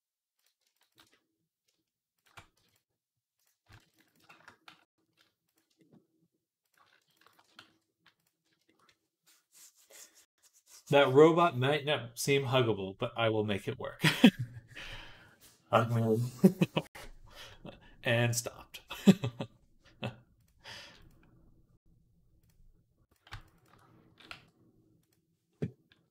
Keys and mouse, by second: 0.6 alt+shift+click, 0.8-6.5 alt+middle drag, 2.4 x, 4.5 x, 6.5 click, 6.6 shift+middle click, 7.1 ctrl+alt+shift+click, 7.2-20.8 alt+middle drag, 7.5 x, 20.8 click, 20.9-22.3 middle drag, 22.3 click, 23.0 alt+shift+middle click, 23.2 alt+shift+click, 23.3-26.1 alt+shift+middle drag, 23.9 s.